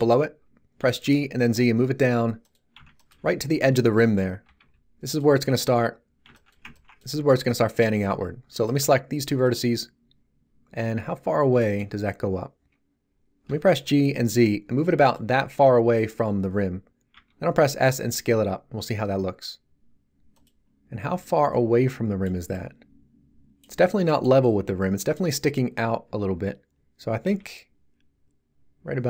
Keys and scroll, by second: 0.7 g, 1.0 z, 4.4 g, 4.6 z, 13.4 g, 13.6 z, 17.1 s, 27.3 s.